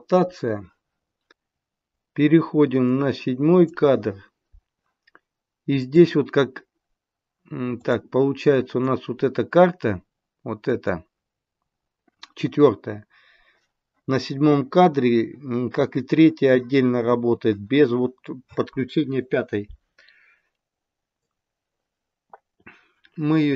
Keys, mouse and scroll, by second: 2.9 click, 5.8 click, 7.7 click, 8.4 click, 10.6 click, 21.1 click.